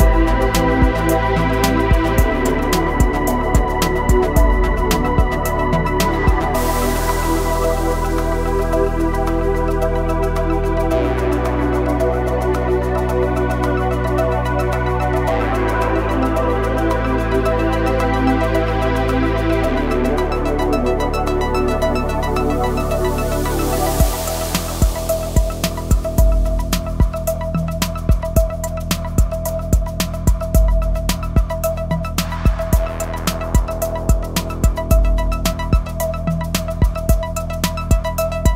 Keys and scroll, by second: 15.3 Tab, 17.4 ctrl+r, 26.8 Tab, 30.2 Tab, 30.7 KP_1, 33.5 ctrl+r, 35.0 Escape, 36.5 s.